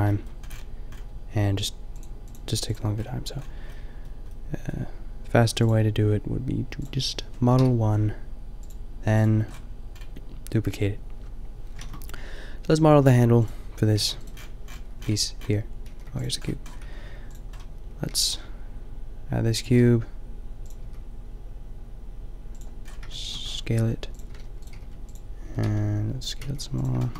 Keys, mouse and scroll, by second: 2.0-2.5 drag, 3.9-4.9 drag, 5.6 click, 7.6 KP_5, 11.9 shift+a, 14.0 g, 15.9 g, 16.8 s, 18.1 g, 19.7 g, 20.9 s, 23.8-26.4 typing, 24.7-26.0 middle drag.